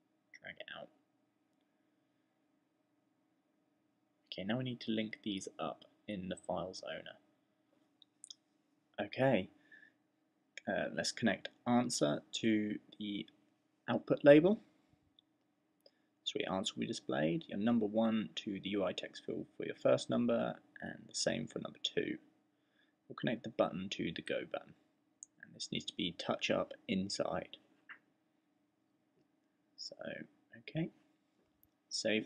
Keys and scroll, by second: 31.2 super+s.